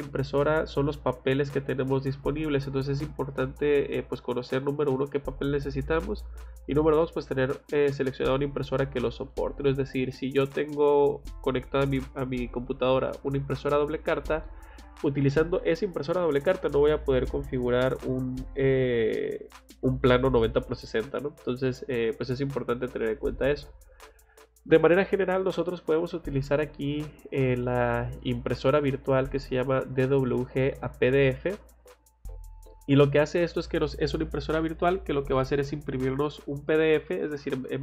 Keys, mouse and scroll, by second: 24.9 click, 31.6 click.